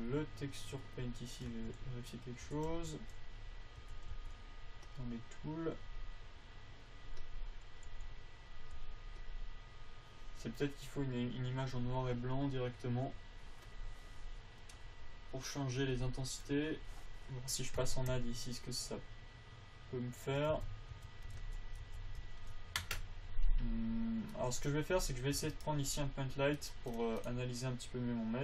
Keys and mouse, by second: 0.3-1.4 drag, 1.9 t, 2.8 t, 3.1 n, 4.2 t, 4.5 n, 5.2-6.4 drag, 8.7 g, 9.5 f, 12.0 click, 14.0-18.5 drag, 21.0 Tab, 21.3 Tab, 21.7 alt+z, 22.2 alt+z, 25.1 click, 25.6 click, 25.7 a, 25.9-27.5 drag, 27.9-28.4 drag.